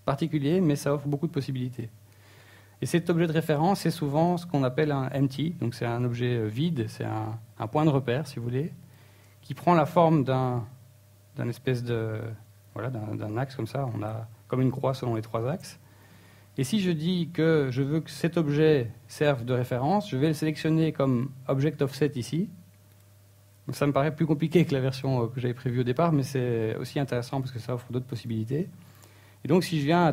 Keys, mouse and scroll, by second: 0.4-0.7 scroll up 2, 0.7 shift+a, 7.0 z, 7.3 middle click, 9.4 middle click, 9.8 shift+middle click, 11.3 scroll down 3, 12.2 KP_1, 12.7 scroll up 2, 13.2 shift+middle click, 14.2 right click, 14.9 shift+middle click, 15.6 scroll up 1, 16.2 shift+middle click, 18.5 click, 20.2 click, 27.4 right click, 27.8 right click, 28.1 r, 28.8 right click, 29.1-29.6 scroll down 2, 29.8 KP_1.